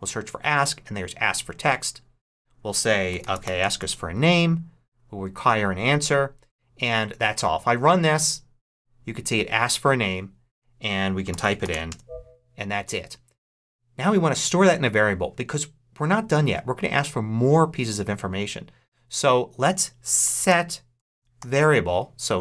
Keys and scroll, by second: 0.0-0.5 typing, 2.8-4.2 typing, 11.0-12.2 typing, 19.7-21.8 typing.